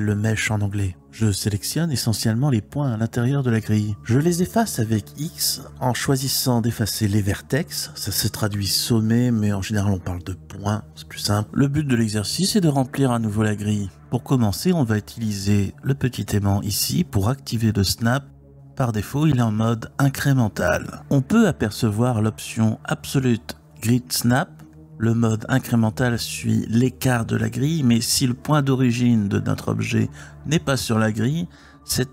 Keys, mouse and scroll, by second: 1.2-2.5 drag, 3.9 x, 7.6 click, 22.4 click, 25.3 Tab, 26.6 g, 29.1 ctrl+click, 32.0 Tab.